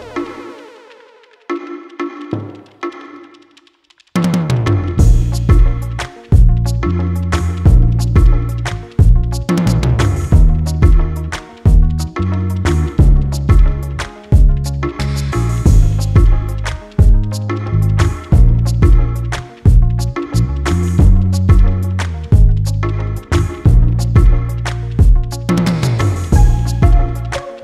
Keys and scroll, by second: 14.8 ctrl+z, 15.8 ctrl+alt+z.